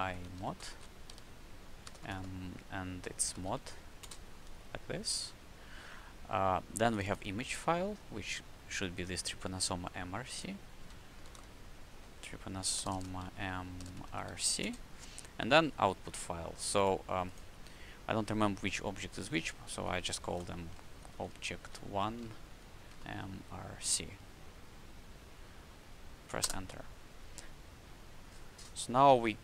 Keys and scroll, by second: 0.0-0.6 typing, 1.8 BackSpace, 2.9-3.7 typing, 4.8 d, 10.9-14.5 typing, 11.8 Tab, 20.2 shift+o, 20.8 b, 21.1 j, 22.1 ., 22.8 m, 23.3 r, 23.7 c, 25.0 c, 26.3 Return.